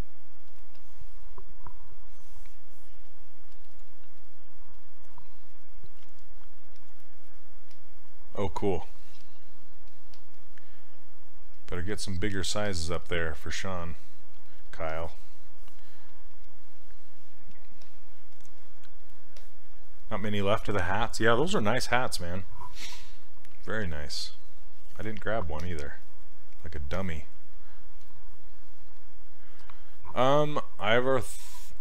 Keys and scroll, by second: 6.1 s, 9.2 s.